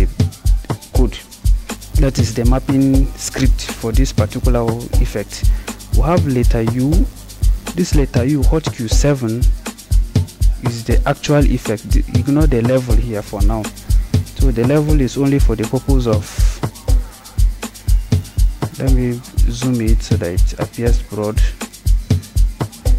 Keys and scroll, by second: 6.7 u, 17.6 =.